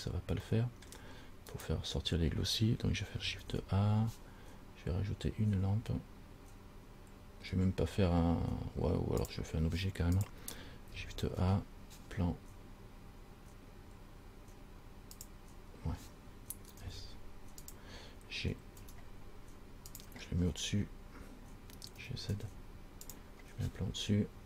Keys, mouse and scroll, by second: 0.7 middle click, 1.7 right click, 3.6 shift+a, 10.4 click, 11.4 shift+a, 17.0 s, 19.0 g, 20.7-22.2 scroll down 4, 22.2 g.